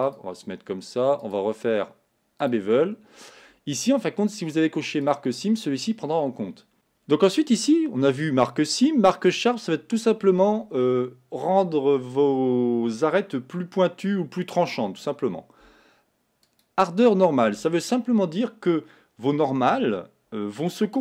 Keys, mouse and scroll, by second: 0.1 click, 2.5-5.1 drag, 6.7-9.3 middle drag, 9.3-16.6 drag.